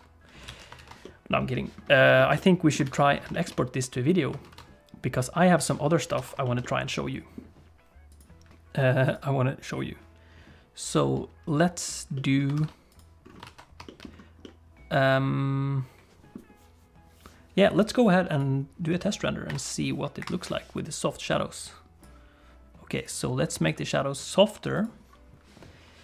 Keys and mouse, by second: 0.5 alt+a, 0.8 ctrl+s, 1.0 click, 2.2 shift+click, 2.4 click, 2.9 ctrl+s, 3.4 shift+click, 3.6 click, 4.5 ctrl+s, 6.2 ctrl+s, 6.4 shift+click, 6.6 click, 8.1 click, 9.1 click, 12.1 middle click, 12.6 ctrl+s, 13.0 click, 13.5 ctrl+s, 13.9 shift+middle click, 14.4-16.3 middle drag, 18.3 click, 19.6 click, 20.5 F12, 23.7 click, 24.8 click.